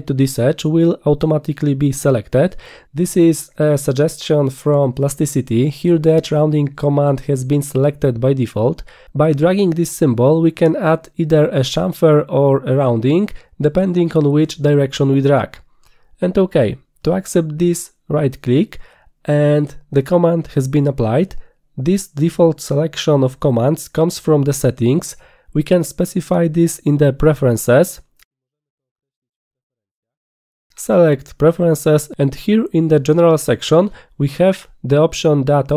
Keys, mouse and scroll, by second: 8.8-17.5 drag, 21.3 right click, 28.5 click, 31.6 click, 34.9 click.